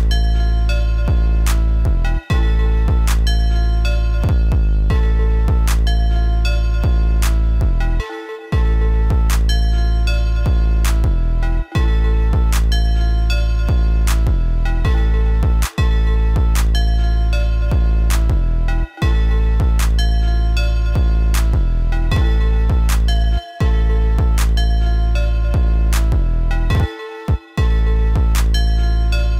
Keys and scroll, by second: 13.5 ctrl+c, 13.8 ctrl+b.